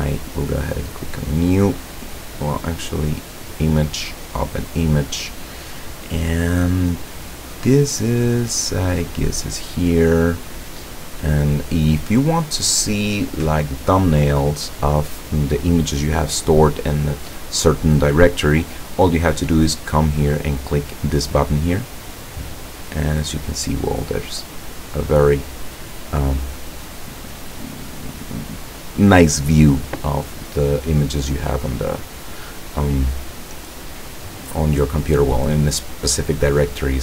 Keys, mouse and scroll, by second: 0.8 click, 2.2 click, 3.2 click, 4.1 click, 9.2 click, 22.3 click.